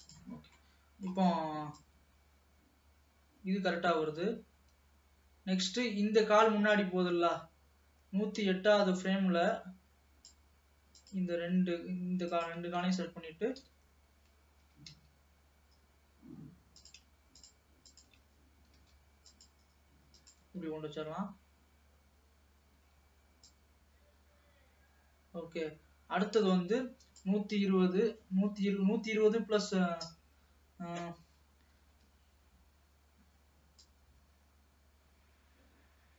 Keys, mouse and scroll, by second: 0.5 scroll down 1, 0.7-1.9 middle drag, 1.9-4.9 drag, 11.1 click, 12.3 shift+click, 13.6 KP_3, 14.7 g, 17.4 shift+click, 18.0 shift+click, 20.2 click, 20.5 space, 22.9 space, 23.6-26.7 drag, 33.9-36.1 drag.